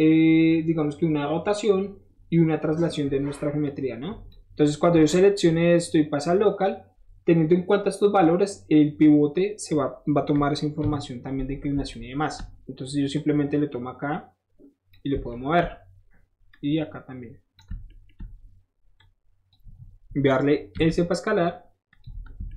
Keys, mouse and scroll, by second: 3.6 click, 4.8 middle click, 4.9 middle click, 12.2 shift+middle click, 13.1-14.9 shift+drag, 15.3 shift+middle click, 16.5-17.5 shift+drag, 17.7 shift+middle click, 19.0 shift+click, 20.8 s, 21.9 click, 22.2 shift+middle click.